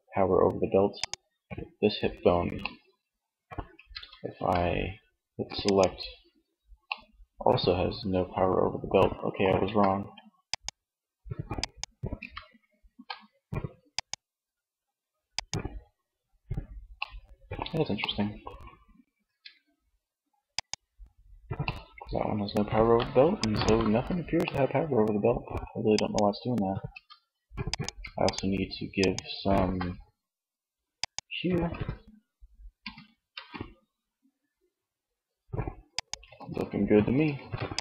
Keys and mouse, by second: 0.0-1.8 drag, 1.8-2.9 middle drag, 2.9 Tab, 3.3 a, 5.9 middle click, 8.8 Tab, 11.3 Tab, 12.0 a, 14.7-16.1 drag, 16.1 middle click, 18.5 Tab, 22.5-24.4 middle drag, 26.1 Tab, 30.9 Tab, 31.7 r, 35.1 click, 35.3 ctrl+z, 36.4 ctrl+s.